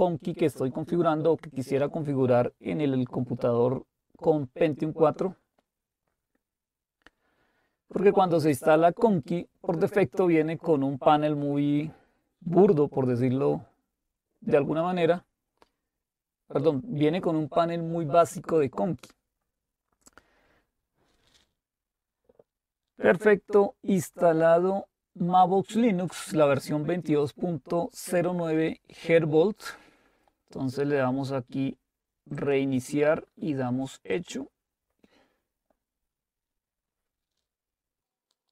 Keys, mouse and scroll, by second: 32.4 click, 34.6 click.